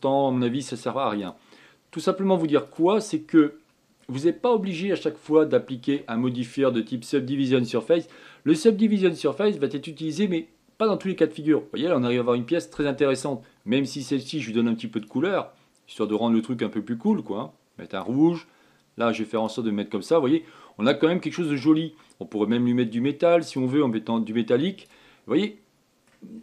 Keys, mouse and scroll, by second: 3.4 click, 4.1-5.3 middle drag, 5.3-6.0 scroll down 2, 6.0-9.2 shift+middle drag, 14.6 click, 15.7-17.0 drag, 20.1 click, 20.6-23.6 middle drag, 24.3-26.1 drag, 26.1 middle click.